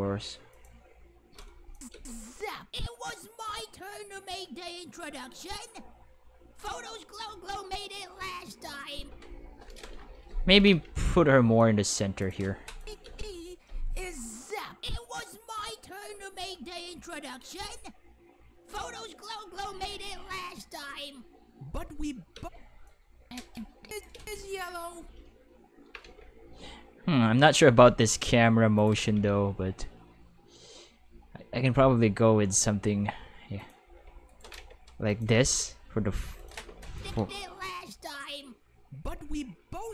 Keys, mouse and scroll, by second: 0.0-0.1 typing, 0.5 click, 1.7 click, 1.9 space, 8.9 space, 10.3-11.2 typing, 12.2 click, 12.8 click, 13.0 space, 22.3 space, 22.9-24.0 drag, 24.1-26.5 typing, 28.6-29.7 typing, 28.7 click, 33.6 click, 33.7-35.9 typing, 34.2 right click, 35.1 click, 36.4 click, 36.9 click, 37.2 space.